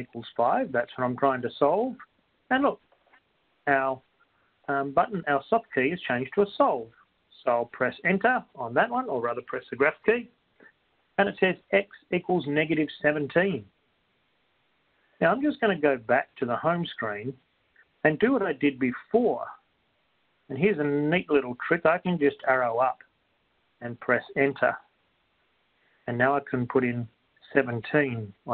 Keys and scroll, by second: 21.7 Up, 24.9 Return, 25.4 Left.